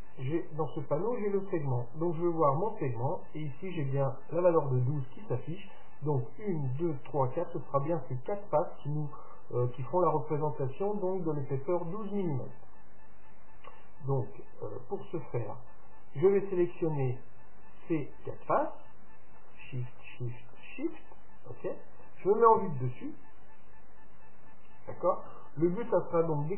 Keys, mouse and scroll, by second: 0.1-1.8 drag, 2.0-3.8 drag, 16.3-18.3 drag, 17.9-22.2 right drag, 22.3 right click, 22.6 KP_7, 24.1-26.5 middle drag, 24.1 scroll up 1.